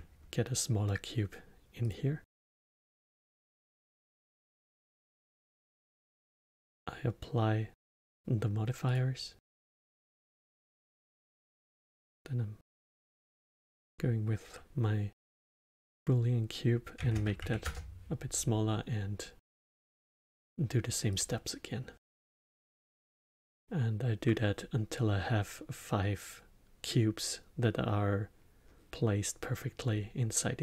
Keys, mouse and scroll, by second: 1.8 click, 3.1-6.2 drag, 7.7 click, 8.8-11.0 drag, 12.6-15.7 drag, 19.4 click, 21.1-24.2 drag.